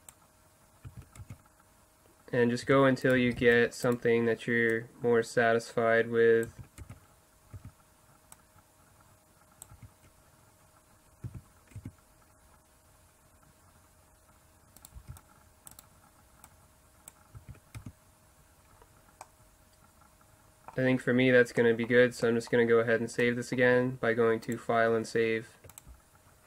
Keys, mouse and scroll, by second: 0.9 z, 1.2 Tab, 2.7 Tab, 3.2 z, 3.4 c, 4.7 middle click, 6.0 click, 6.5 z, 6.8 Tab, 7.6 Tab, 8.4 click, 9.7 Tab, 11.3 z, 11.8 Tab, 15.1 c, 16.5 middle click, 17.1 click, 17.4 z, 17.8 Tab, 19.3 middle click, 19.6 middle click, 19.8 middle click, 20.3-20.9 middle drag, 21.3 middle click, 21.6-22.4 middle drag, 23.2 middle click, 24.0 middle click, 24.4-26.2 drag.